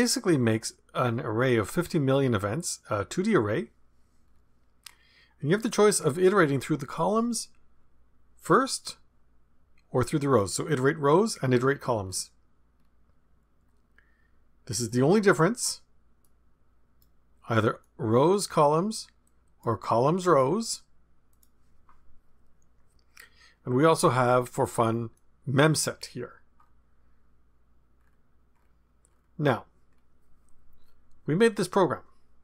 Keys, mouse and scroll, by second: 0.0-1.3 drag, 2.6-3.4 scroll down 1, 4.2-5.1 scroll down 1, 8.4-9.6 scroll down 2, 12.0-13.4 scroll down 2, 16.2-17.3 drag, 17.8 click, 19.2 click, 20.3 click, 21.3 click, 26.5-27.1 scroll up 1, 27.1 scroll up 1, 27.9-29.8 scroll up 1, 29.9-30.6 scroll down 1.